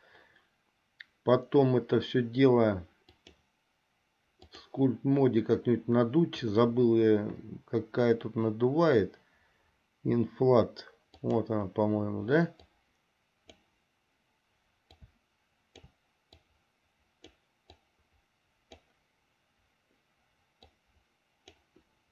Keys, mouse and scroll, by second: 3.3-5.0 drag, 11.4 click, 12.8-13.8 drag, 15.2 click, 16.7 click, 18.0-19.1 drag, 20.8-21.9 drag.